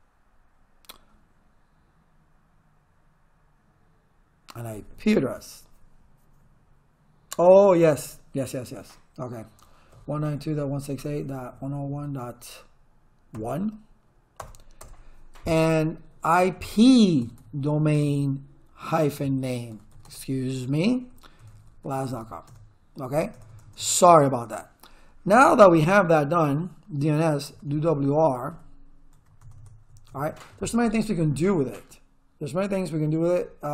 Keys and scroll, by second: 9.7-13.3 typing, 14.4 Return, 16.0-22.7 typing, 27.3-29.2 typing, 29.4 Return.